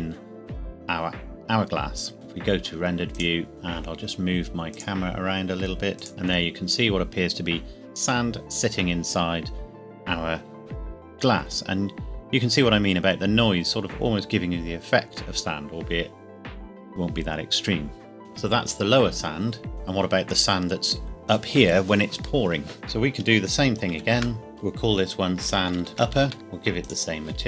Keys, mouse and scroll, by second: 2.1 alt+h, 3.1 click, 3.5 KP_0, 4.7 click, 6.1-7.0 scroll up 1, 18.2 ctrl+s, 22.7 click, 23.1 shift+click, 23.9 shift+a, 25.4-26.4 typing, 26.9 click.